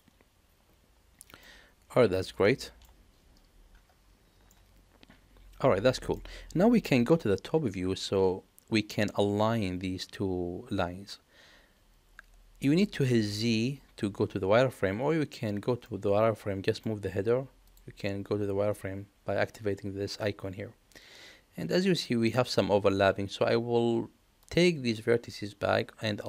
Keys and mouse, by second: 2.6 shift+middle click, 4.4-6.1 middle drag, 7.4 KP_7, 15.9 middle click, 18.7 click, 24.4-26.2 drag.